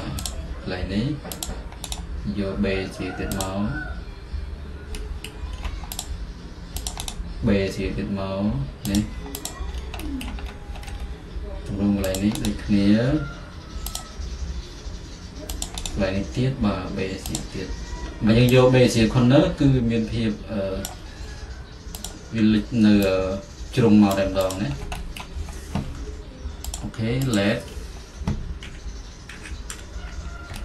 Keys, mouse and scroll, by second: 0.0-2.1 drag, 2.0-5.6 right drag, 5.6 middle click, 6.2-7.2 drag, 7.2-9.5 right drag, 9.5 click, 10.4-12.3 middle drag, 12.2-16.0 drag, 15.9-19.4 right drag, 19.4 click, 21.0-25.3 drag, 25.3-27.4 middle drag, 27.4 click, 27.9 middle click, 28.8-29.9 typing, 29.8 middle click.